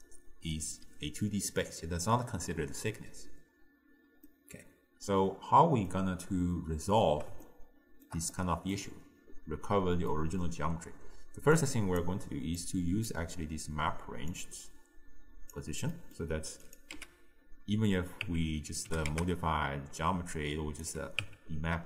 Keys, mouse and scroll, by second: 0.0 right click, 0.6 d, 4.3-7.3 middle drag, 7.5-11.6 shift+middle drag, 11.6 click, 12.6 click, 14.3 drag, 16.0-16.7 middle drag, 16.7 click, 17.0 x, 18.3 Tab, 18.9 g, 21.3 Tab.